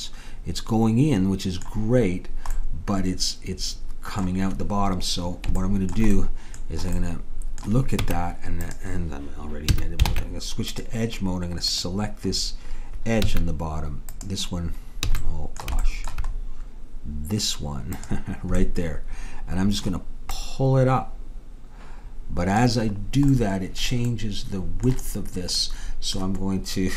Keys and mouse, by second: 2.3-4.3 middle drag, 5.7 middle click, 8.0 Tab, 9.8 a, 10.2 ctrl+Tab, 11.7-15.9 drag, 13.4 a, 15.2 a, 18.0-19.9 drag, 20.4-22.3 drag, 23.2-26.0 middle drag.